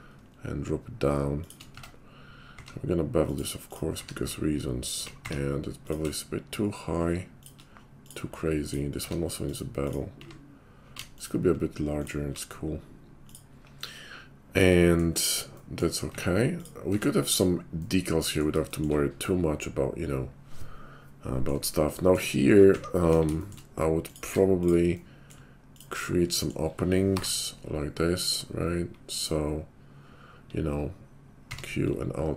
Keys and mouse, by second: 0.2-1.6 shift+drag, 1.6-8.1 middle drag, 1.7 Tab, 2.6 q, 4.0 q, 5.2 q, 8.1 click, 8.2-17.3 middle drag, 8.9 q, 10.1 q, 16.1 Tab, 16.9 Tab, 17.3 click, 17.5-24.0 middle drag, 22.6 `, 23.1 KP_5, 24.0 click, 24.1-25.4 middle drag, 24.2 Tab, 25.4 shift+click, 25.9-32.3 middle drag, 27.1 i, 31.4 q.